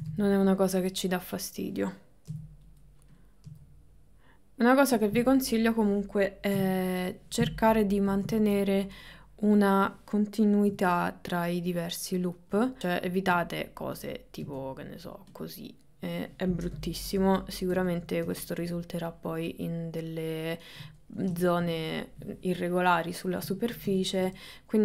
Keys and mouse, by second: 0.0 g, 2.3 g, 5.5 click, 6.6 g, 8.0 middle click, 8.4 middle click, 9.5 click, 10.7 g, 12.5 g, 14.1 click, 17.0 ctrl+z, 17.3 ctrl+z, 18.5 shift+middle click, 19.5-20.9 middle drag, 21.1 ctrl+middle click, 22.3 middle click, 23.0 middle click, 23.7 ctrl+middle click, 24.5 middle click.